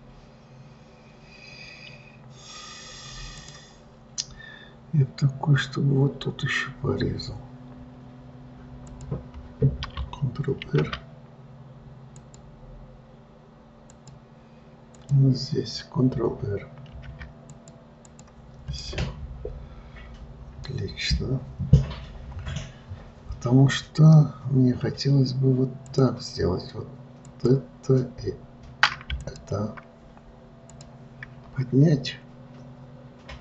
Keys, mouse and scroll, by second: 3.7 click, 4.3-7.3 scroll up 2, 9.2 click, 11.0 ctrl+r, 15.2 click, 17.3 ctrl+r, 19.1-22.2 middle drag, 26.2-27.7 drag, 29.5 shift+click, 31.0-33.4 drag.